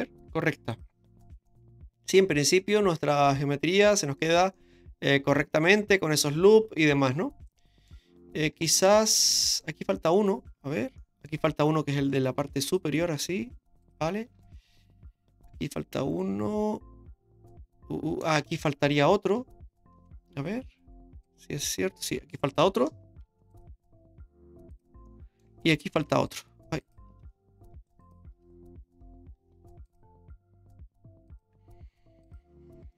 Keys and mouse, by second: 0.7 click, 1.5-4.2 middle drag, 4.3 Tab, 4.5-7.9 middle drag, 8.7 shift+middle drag, 9.1 middle click, 9.7 Tab, 11.0 middle click, 12.4 ctrl+r, 14.3 Tab, 14.8-18.2 middle drag, 18.3 Tab, 21.2 click, 23.2 ctrl+r, 25.1 middle click, 26.0 ctrl+r, 28.4 ctrl+z, 29.5 ctrl+r, 32.2 click.